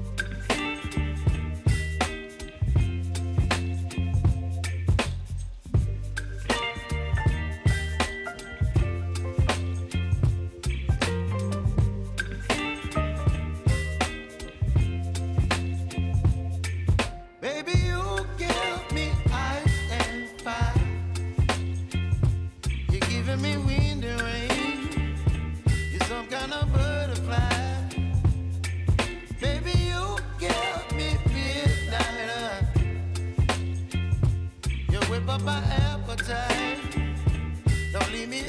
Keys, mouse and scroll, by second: 1.1 p, 2.0 click, 3.1 s, 3.7 click, 4.2-6.1 typing, 4.4 click, 6.7 click, 7.4 j, 8.4 click, 9.2 ctrl+c, 9.6 click, 10.0 ctrl+v, 10.7 click, 11.1 k, 12.7 click, 13.5 Return, 14.3 typing, 15.3 click, 16.3 F9, 17.3 click, 18.7 scroll down 1, 21.5 scroll up 1, 22.3-26.8 drag, 27.3 Return, 28.1 space, 29.7 typing, 31.1 click, 33.7 p, 34.5 click, 35.4-38.4 typing, 35.6 click, 36.6 click.